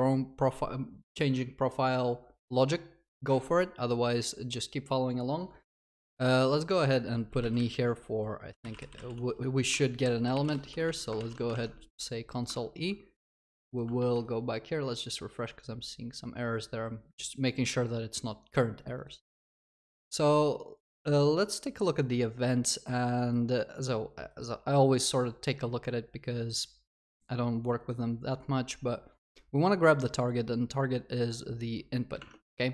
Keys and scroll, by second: 9.7 Return, 11.2 ctrl+s.